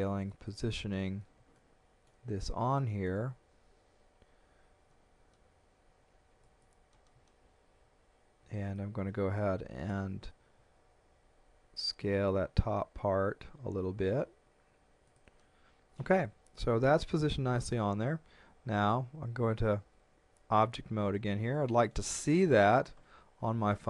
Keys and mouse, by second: 0.3 click, 1.6 shift+middle click, 2.8 shift+middle click, 4.9 g, 6.4 click, 7.7 a, 8.4 b, 8.8 click, 11.5 s, 15.1 click, 19.4 Tab, 21.6 shift+middle click.